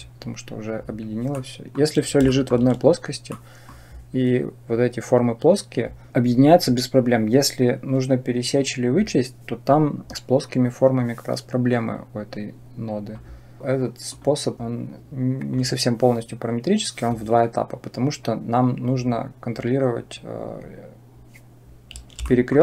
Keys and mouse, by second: 1.3-1.7 drag, 2.3 shift+click, 3.3 click, 11.8-13.0 drag, 14.0 click, 15.4 click, 22.2 shift+middle click.